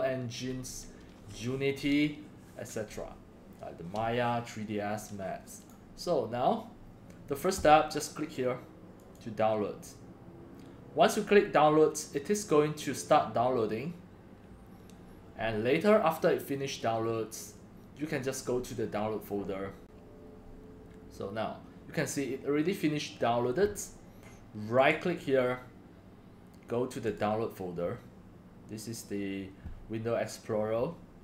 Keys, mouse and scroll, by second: 3.5 click, 5.6 click, 5.7 click, 9.0 click, 15.5 middle click, 24.7 right click, 27.0 click.